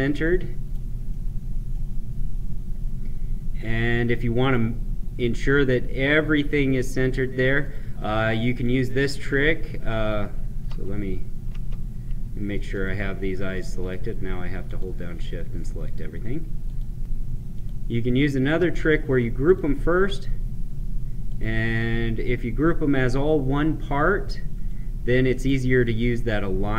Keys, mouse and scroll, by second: 1.0 scroll up 1, 1.1 middle click, 2.1 scroll down 1, 4.3-7.5 drag, 10.6 ctrl+z, 12.7 click, 13.7 shift+click, 19.4 click, 24.6-26.7 drag.